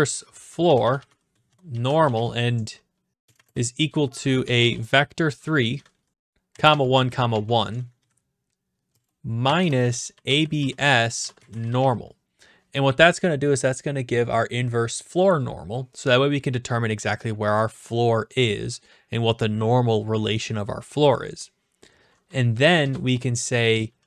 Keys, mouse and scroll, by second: 0.0-8.0 typing, 5.9 Down, 9.4-12.3 typing, 22.8 Return.